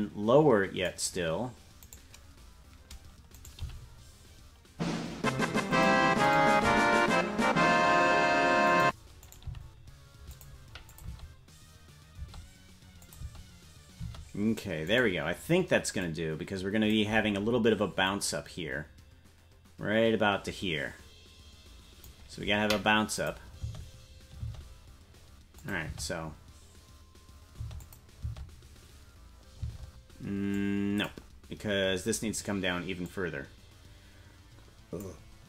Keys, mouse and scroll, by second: 2.0 right click, 3.6 right click, 3.6 g, 6.3 right click, 6.6 g, 9.4 g, 10.9-12.4 drag, 11.1 space, 12.1 space, 13.0 click, 13.2 space, 14.9 space, 15.0 right click, 16.0 click, 18.0-22.1 drag, 23.2 click, 23.6 space, 25.1 space, 25.6 click, 25.8 space, 27.8 click, 27.8 space, 28.2 space, 30.5 click, 30.5 space, 33.0-35.1 drag.